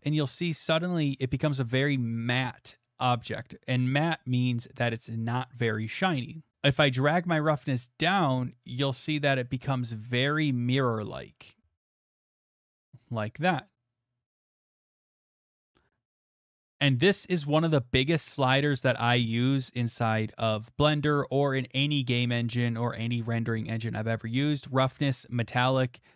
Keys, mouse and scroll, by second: 0.6-3.0 drag, 3.0-6.8 middle drag, 11.3-14.4 drag, 14.6-17.1 middle drag, 17.1-18.6 drag.